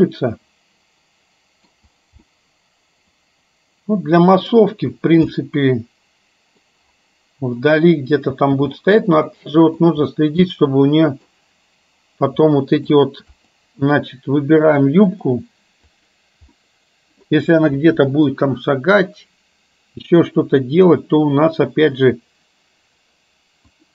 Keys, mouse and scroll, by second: 0.1-2.0 middle drag, 2.5-4.7 middle drag, 5.6-6.7 middle drag, 8.3 space, 9.3-9.8 middle drag, 10.6-11.5 middle drag, 12.5-12.8 middle drag, 13.3 click, 14.7-15.3 drag, 16.1 click, 16.7 middle click, 23.7-23.9 drag.